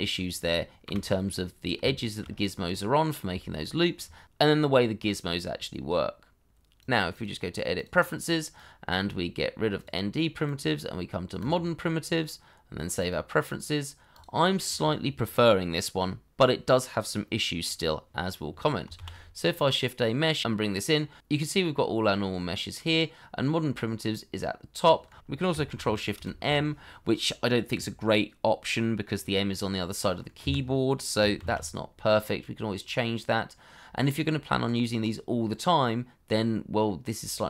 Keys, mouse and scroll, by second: 0.8 Delete, 1.6 scroll down 1, 1.9 shift+middle click, 2.2-2.7 shift+scroll up 1, 2.7 middle click, 3.3 shift+middle click, 7.1 double click, 18.9 shift+a, 26.1 ctrl+shift+m, 30.4 Escape, 31.3 shift+a.